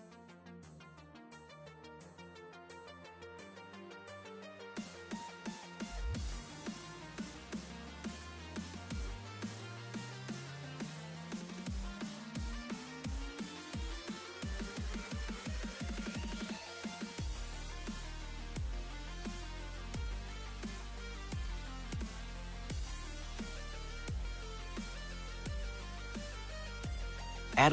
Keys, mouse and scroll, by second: 10.0 click, 10.7-11.5 middle drag, 11.5-12.2 scroll up 3, 12.2-13.6 scroll down 1, 13.6 middle click, 14.3-15.3 scroll down 11, 15.3-17.4 middle drag, 17.4-18.2 scroll down 1, 18.2-18.9 scroll up 1, 18.9 shift+a, 24.5 shift+a.